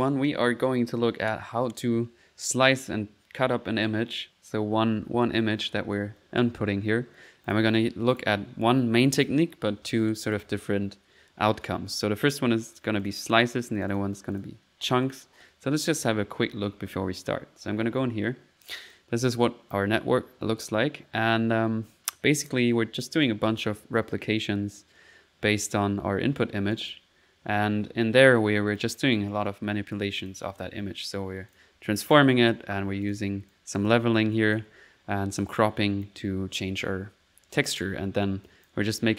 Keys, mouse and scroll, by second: 7.4 click, 8.1 click, 10.3 click, 13.0 click, 15.0 click, 17.6 middle click, 18.9-20.0 drag, 22.3 middle click, 23.0 click, 23.8 click, 25.9 middle click, 26.7 click, 28.6 click, 29.3 right click, 30.2 click, 31.0 middle click, 31.5 click, 31.8 middle click, 32.3 click, 33.0 click, 33.4 click, 34.3 click, 35.5 click, 35.9 middle click, 36.0 click, 36.8 middle click, 38.4 click.